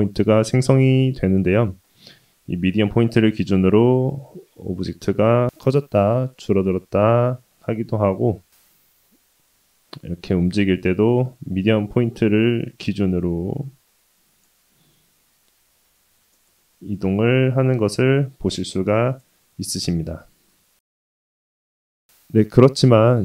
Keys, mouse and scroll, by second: 1.7 click, 3.6 click, 5.4 middle click, 5.5 s, 13.8 click, 15.7 click, 18.0-19.3 drag, 19.7-20.5 scroll down 1, 20.5-21.0 scroll up 1, 21.1 shift+middle click.